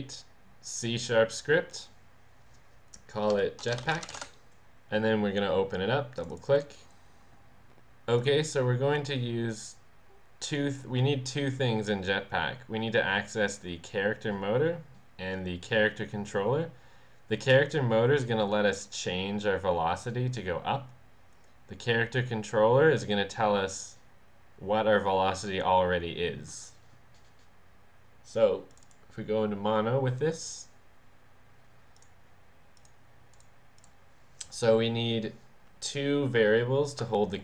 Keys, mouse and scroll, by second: 1.7 click, 3.4-4.7 typing, 6.2 click, 8.2 click, 9.7 click, 28.8 click, 32.8-33.8 drag.